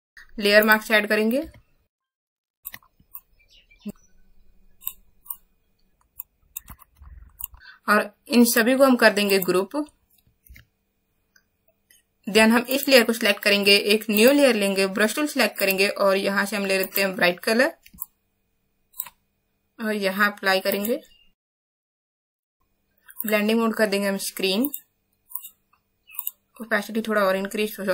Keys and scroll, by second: 0.0 Up, 1.9 space, 2.3 x, 2.6 space, 3.9 ctrl+z, 10.4 ctrl+shift+g.